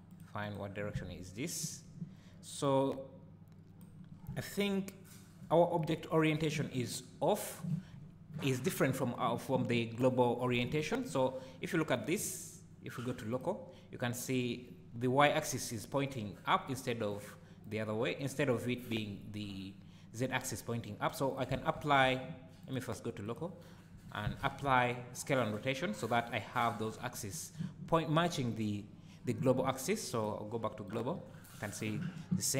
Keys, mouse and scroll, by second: 0.1 click, 0.4 click, 1.0 `, 2.6-3.5 drag, 4.1 scroll down 1, 4.3 `, 12.2 click, 17.1 click, 21.3 click, 21.8 ctrl+a, 22.6-32.5 drag, 24.4 ctrl+a.